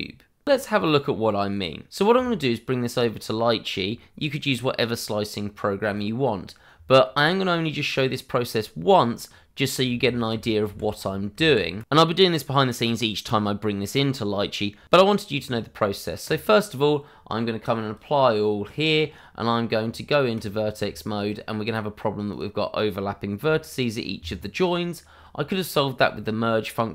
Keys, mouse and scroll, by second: 2.2-2.8 scroll down 1, 4.4 shift+middle click, 6.3 shift+middle click, 6.5 scroll up 1, 6.8 shift+middle click, 9.9 ctrl+z, 12.8-13.7 scroll down 1, 14.9 shift+middle click, 15.1 scroll up 1, 16.7 click, 18.9-19.3 scroll up 1, 19.8 Tab, 20.5 scroll up 1, 20.9 shift+middle click, 21.2 scroll up 1, 22.2 click, 22.9-23.4 scroll up 1, 23.4 g, 24.1 Escape, 24.4 scroll down 1, 26.1 shift+middle click.